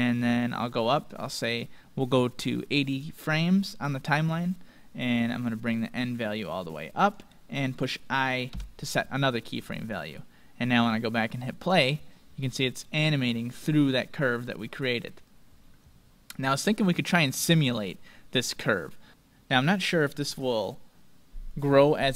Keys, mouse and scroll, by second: 0.0-1.7 drag, 5.6-7.5 drag, 10.6-13.4 drag, 16.6-20.7 drag.